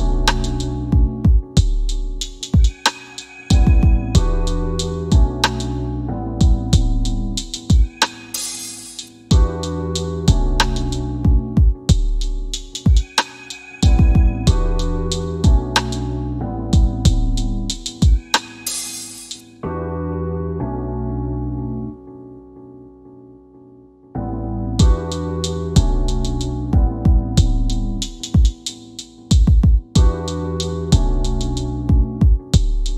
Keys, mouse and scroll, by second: 5.8 click, 6.8 scroll up 1, 7.1 scroll down 1, 7.7 middle click, 8.9 typing, 11.0 click, 11.9 scroll up 1, 12.8 scroll down 1, 13.6 alt+w, 14.1 w, 14.3 scroll down 1, 14.8 click, 18.1 click, 24.9 click, 30.6 right click, 31.2 w, 31.7 w, 32.0 scroll down 1.